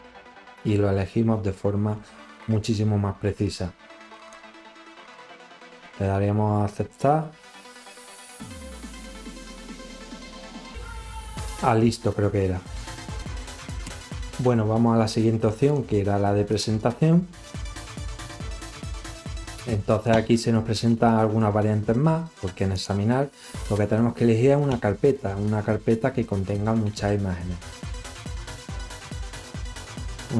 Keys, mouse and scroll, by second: 3.4 click, 8.6 scroll up 2, 9.8 click, 10.6 click, 13.5 scroll up 2, 15.1 scroll up 1, 16.9 click, 24.5 click.